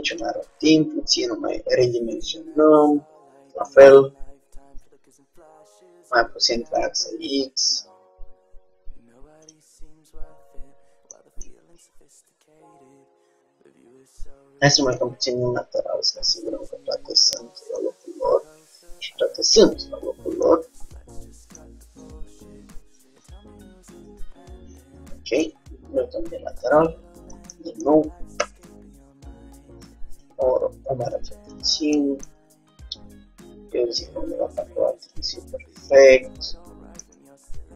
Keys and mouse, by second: 0.7 s, 7.5 g, 11.3-12.5 middle drag, 15.0 KP_1, 15.2 z, 22.1 Tab, 23.4 Tab, 25.5 KP_3, 28.5 r, 30.9 g, 35.4 g, 37.1 Tab.